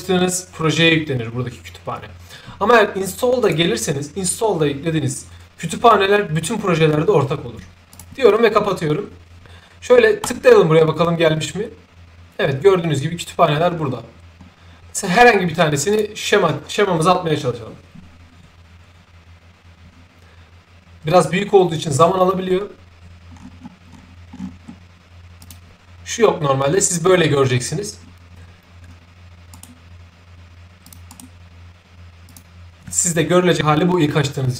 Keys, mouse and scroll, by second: 3.3 click, 7.8 click, 10.1 click, 13.3 middle click, 13.3-14.2 scroll down 1, 14.3 middle click, 14.3-14.8 scroll up 1, 15.8 click, 23.3 middle click, 23.3-23.6 scroll down 2, 23.8 middle click, 25.3 click, 29.4 right click, 30.8 click, 31.0 right click, 32.2 click.